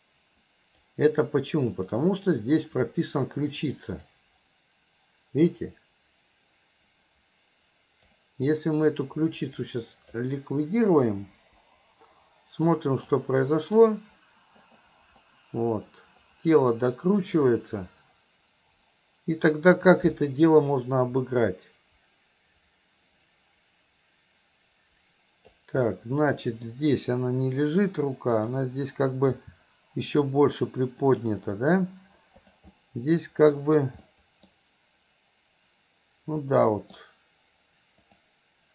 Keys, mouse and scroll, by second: 1.8 click, 3.7 click, 4.2-8.3 drag, 8.5-10.1 drag, 11.4 Delete, 12.8 click, 13.2-25.6 drag, 25.9-26.7 middle drag, 28.3 click, 29.3 r, 32.4 click, 32.8-33.6 middle drag, 34.1-34.5 middle drag, 36.5-37.0 middle drag, 38.0 click.